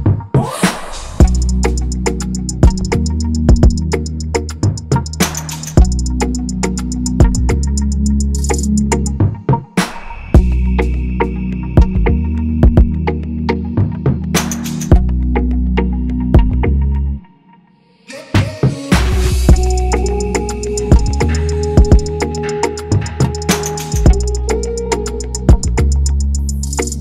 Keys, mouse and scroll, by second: 0.0-0.9 typing, 0.0 scroll up 1, 0.1 click, 0.1 middle click, 0.3 click, 1.1-1.7 drag, 2.5 click, 3.3-5.2 drag, 5.6 scroll down 3, 7.5 click, 7.7 click, 10.5 click, 14.3 scroll up 3, 14.4 click, 15.7-16.3 drag, 17.7 click, 17.9 click, 18.8-20.9 drag, 21.1 click, 22.1-24.9 drag, 25.1 click.